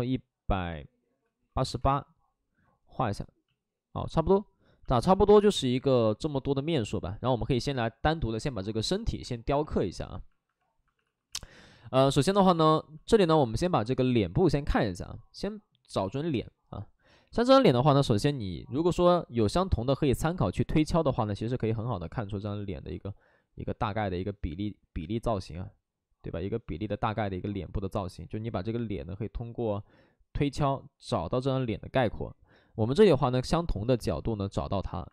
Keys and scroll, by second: 1.1-2.2 typing, 3.5 shift+f, 5.0 alt+s, 7.5 alt+s, 9.2 space, 10.9 space, 11.0 alt+s.